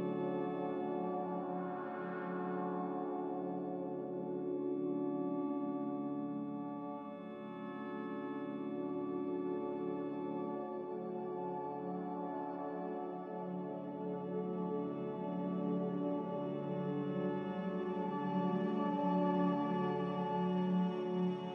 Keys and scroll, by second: 2.1 z, 5.8 s, 7.2-9.6 typing, 11.9-13.2 typing, 20.4 z.